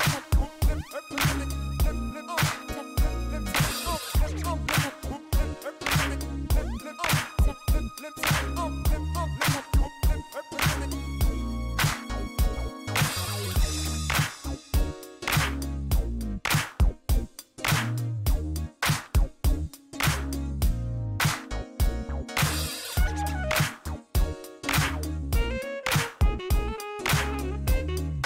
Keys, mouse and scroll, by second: 3.0 shift+right click, 5.2 shift+right click, 7.5 shift+right click, 15.2 middle click, 16.2 scroll down 1, 16.6 shift+right click, 19.5 shift+right click, 21.1 shift+right click, 22.1 shift+right click, 24.0 right click, 25.8 right click, 27.2 shift+right click.